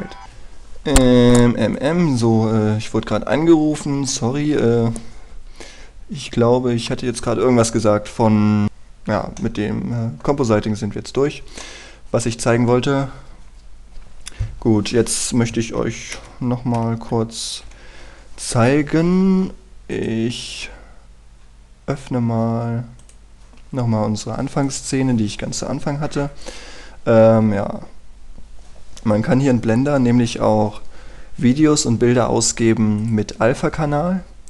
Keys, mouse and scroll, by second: 1.3 F9, 2.3 click, 10.1 middle click, 11.3-12.1 scroll down 1, 12.1 scroll up 1, 12.3 middle click, 16.9 ctrl+Right, 17.5 ctrl+Right, 18.1 ctrl+Left, 20.6 click, 24.9 scroll down 1, 25.1-33.7 scroll up 1, 33.7 click.